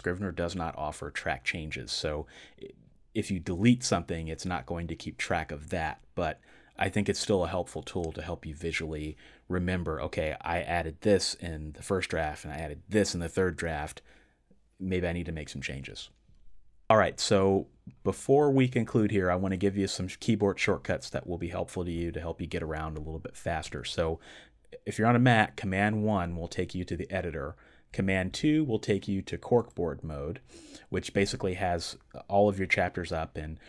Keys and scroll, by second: 28.1 super+2.